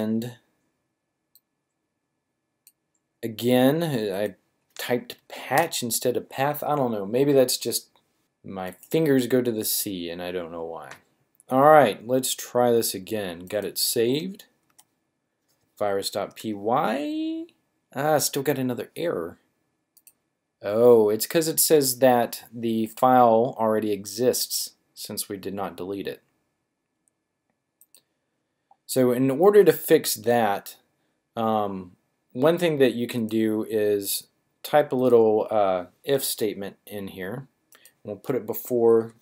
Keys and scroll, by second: 14.7 Up.